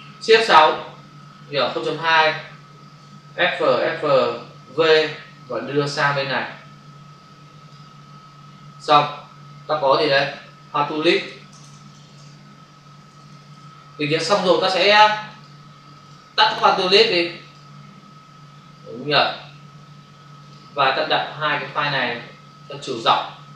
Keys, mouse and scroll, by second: 1.0 shift+F6, 1.8 Return, 3.0 f, 4.5 v, 5.5 click, 9.9 click, 10.1 click, 10.2 double click, 11.3-13.4 typing, 13.4 Return, 15.2 click, 16.0 click, 20.3 click, 21.7 click.